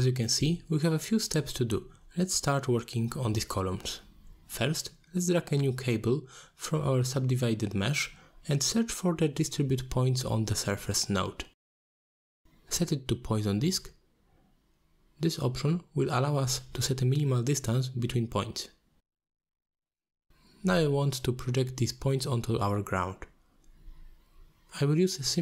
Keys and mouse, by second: 0.1 ctrl+z, 0.4 middle click, 0.9 ctrl+r, 1.8 Tab, 2.5-3.4 middle drag, 4.8 shift+middle drag, 5.6 middle drag, 6.1 middle drag, 7.1 click, 7.4-8.2 drag, 8.2 r, 8.2 g, 8.6-12.5 drag, 12.7 alt+shift+click, 13.1 middle click, 14.2-14.9 drag, 15.1 click, 16.5 click, 18.7 shift+click, 20.2 shift+click, 20.9 click, 24.3 click.